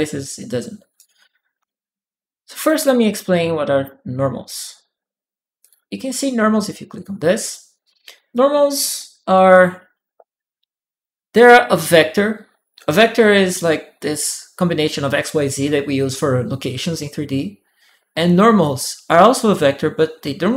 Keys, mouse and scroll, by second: 0.7-2.6 typing, 0.7 right click, 1.2 right click, 2.4-5.4 middle drag, 5.4 click.